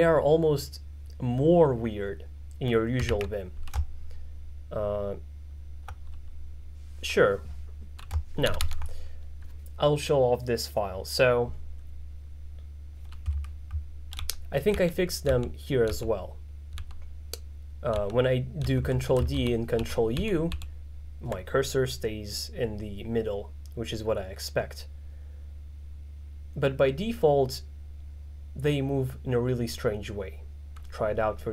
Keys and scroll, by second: 3.3 alt+4, 8.5 shift+z, 14.2 ctrl+d, 16.8 ctrl+d, 18.0 ctrl+d, 19.4 ctrl+u.